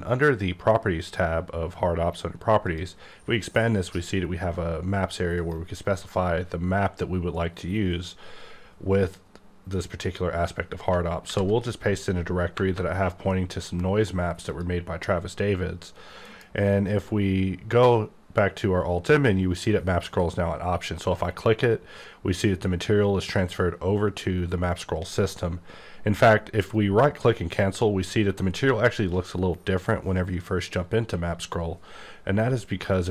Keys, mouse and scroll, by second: 2.6 click, 5.4 click, 10.9 ctrl+Num_Lock, 11.2 ctrl+v, 12.5 KP_Enter, 14.5 click, 16.2 alt+m, 20.8 click, 26.6 right click, 28.4 m, 29.0 click, 32.9 click.